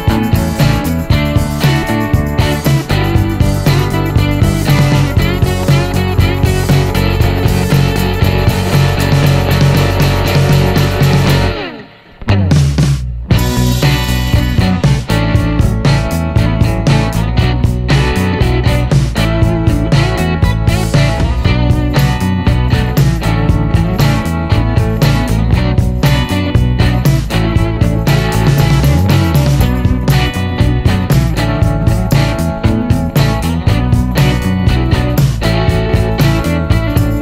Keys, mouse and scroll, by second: 0.1-0.5 scroll up 1, 0.7 scroll up 1, 1.1 click, 2.4 middle click, 3.0 t, 3.7-5.4 drag, 5.4 t, 5.8 middle click, 6.4 middle click, 7.4 click, 8.5 t, 9.0 click, 9.8 t, 10.3 middle click, 11.2 t, 11.6 middle click, 12.1 middle click, 12.9 click, 13.9 t, 14.5 click, 15.4 t, 15.7 click, 15.9 middle click, 16.3 scroll down 1, 16.6 middle click, 17.1-17.5 scroll up 1, 17.6-18.9 drag, 19.1 t, 19.5 click, 20.4 t, 20.7 middle click, 21.4-22.1 scroll down 2, 22.1 middle click, 22.6-23.0 scroll up 1, 23.2-24.4 drag, 24.5 t, 25.0 click, 26.0 t, 26.4 scroll down 1, 26.7 middle click, 26.8 click, 27.4 middle click, 27.7-28.2 scroll up 1, 28.4 click, 29.4 t, 30.0 click, 30.9 t, 31.3 scroll down 1, 31.6 middle click, 32.2 scroll down 1, 32.4-33.9 drag, 33.9 scroll down 1, 34.1-35.5 drag, 35.5-36.9 scroll up 1, 36.9 click.